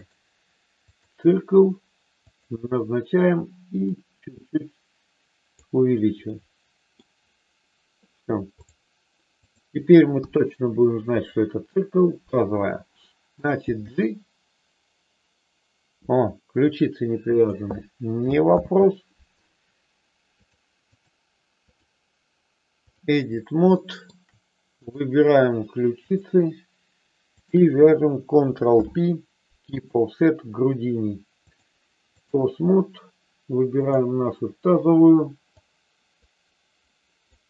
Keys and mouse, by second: 0.0-1.0 drag, 2.3 click, 4.3-5.4 drag, 6.3 middle click, 10.0 KP_1, 13.8 g, 17.3 click, 18.7 ctrl+z, 20.5 click, 21.7-23.0 drag, 23.7 shift+middle click, 24.8 click, 27.4 shift+click, 28.8 ctrl+p, 31.4-32.4 drag, 33.8 click, 35.5-37.3 drag.